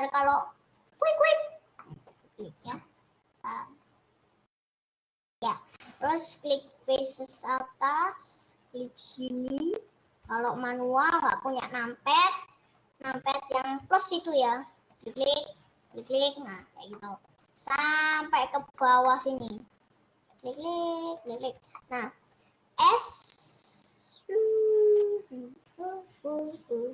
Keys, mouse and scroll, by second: 0.0 middle click, 0.4-0.9 scroll up 1, 0.9 scroll up 1, 1.2 click, 2.0-7.6 middle drag, 7.6 shift+click, 10.0 shift+click, 10.8-15.2 middle drag, 15.2 click, 16.4 click, 18.4-24.2 middle drag, 24.2 s.